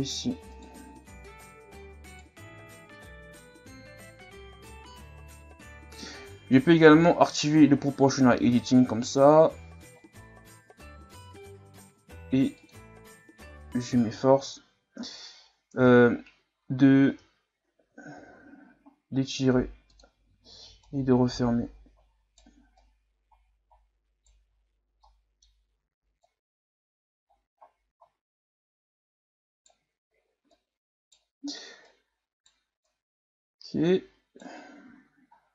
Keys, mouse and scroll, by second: 2.0 alt+right click, 2.9 s, 6.6 o, 8.3 s, 13.0 Tab, 13.3 a, 13.7-14.3 scroll down 3, 14.3 scroll down 2, 14.6-15.7 scroll up 3, 15.0 a, 15.7 Tab, 18.1 s, 20.8 right click, 22.8 right click, 24.5-25.0 scroll up 3, 25.0 middle click, 25.6-26.2 scroll down 1, 26.2 right click, 30.5 right click, 31.9 right click, 32.8 right click, 34.7 scroll down 4, 34.9 Tab, 35.4 scroll down 1.